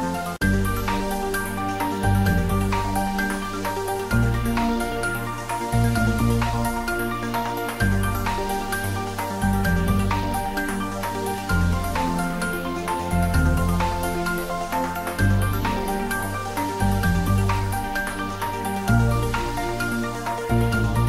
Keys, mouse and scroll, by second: 0.4 click, 0.6 ctrl+middle click, 0.9-1.8 typing, 2.3 click, 2.5 ctrl+middle click, 3.2 ctrl+click, 3.4 middle click, 4.6 s, 5.1 click, 6.1 ctrl+middle click, 6.3-7.3 typing, 8.0 click, 8.2-9.6 ctrl+middle drag, 9.4-10.5 typing, 10.7 Left, 11.6 Return, 11.8 ctrl+s, 12.5 click, 12.8 ctrl+middle click, 13.5 r, 14.6 click, 14.9 g, 15.3 click, 15.5 ctrl+middle click, 15.9 shift+middle click, 16.8 r, 17.2 click, 17.5 g, 20.5 click, 20.7-21.0 middle drag.